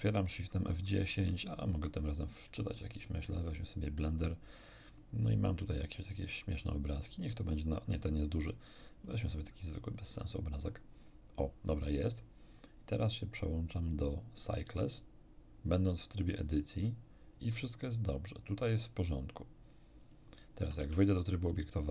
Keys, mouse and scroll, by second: 1.3 click, 3.0 click, 5.8 click, 7.0 click, 9.0 click, 10.2 click, 11.2-11.6 scroll down 2, 13.4 click, 16.4 click, 18.3 click, 18.7 click, 20.0 click, 20.8 Tab.